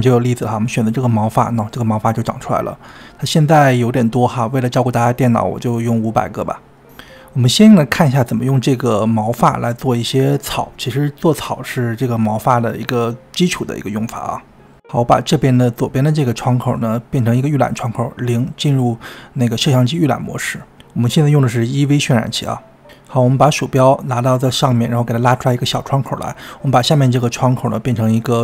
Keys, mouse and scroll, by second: 4.0 KP_0, 7.7-10.7 drag, 14.3-15.6 scroll down 9, 15.6-16.8 drag, 16.8 middle click, 17.7 KP_0, 18.6-19.5 scroll up 9, 19.5-20.7 shift+middle drag, 20.7-28.4 drag.